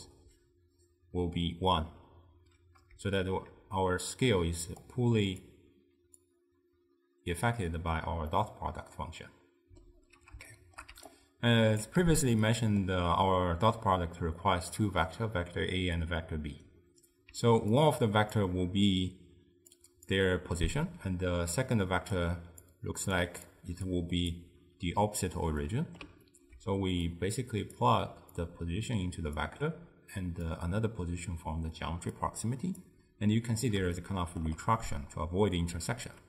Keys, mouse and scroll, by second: 0.6 d, 4.9 click, 6.4 drag, 8.4-11.0 middle drag, 11.0 d, 11.1-12.3 right drag, 12.3-15.3 shift+middle drag, 17.4 d, 17.9-18.4 drag, 18.4-24.8 typing, 19.8 click, 22.3 click, 23.3 click, 23.9-24.4 drag, 25.7-27.1 middle drag, 27.1 drag, 28.4 click, 30.6 drag, 32.2 click, 34.0-36.2 shift+middle drag.